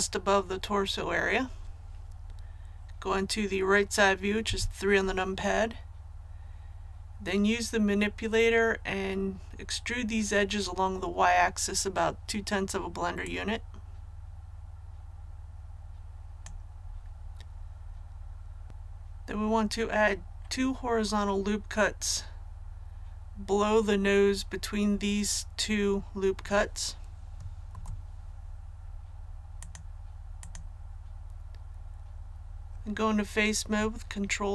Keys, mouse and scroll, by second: 4.4 KP_3, 13.2-16.8 drag, 27.6 ctrl+r, 28.7-29.0 scroll up 1, 29.5 click.